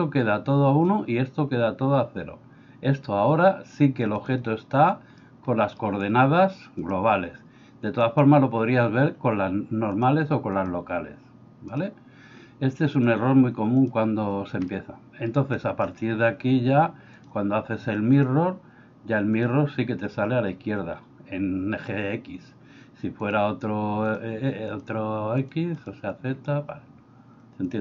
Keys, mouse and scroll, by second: 4.2 click, 5.2 middle click, 6.9-11.8 drag, 13.0-14.0 drag, 14.7-15.3 middle drag, 18.2-19.5 drag, 23.2 click, 24.1 click, 25.4 click.